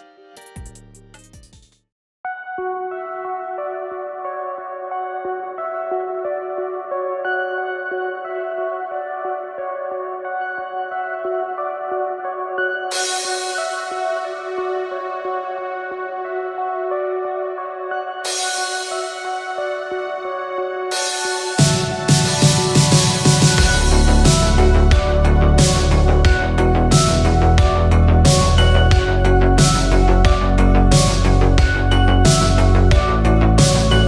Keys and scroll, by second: 3.2 ctrl+t, 15.0 ctrl+t, 18.8 ctrl+a, 20.8 ctrl+d, 23.3-24.5 typing.